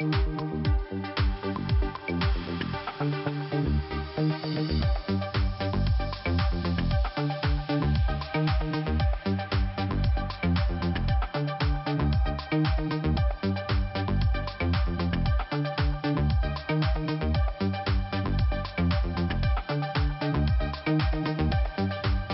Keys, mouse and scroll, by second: 0.1 click, 0.7 click, 2.1 click, 3.5 click, 3.9 click, 4.0 double click, 4.5 double click, 5.5 click, 6.2 click, 7.5 click, 9.2 click, 11.2 click, 11.2 click, 12.3 click, 12.9 click, 14.5 click, 16.3 click, 17.0 click, 18.5 click, 19.1 click, 20.0 click, 20.5 click, 21.5 click.